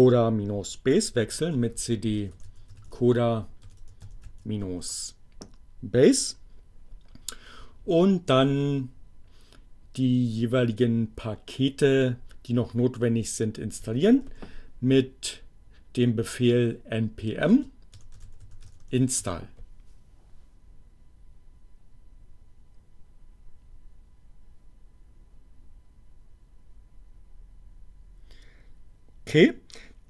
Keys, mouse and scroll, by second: 1.0-4.8 typing, 13.7-14.6 typing, 16.7 space, 16.8 i, 17.9-19.2 typing.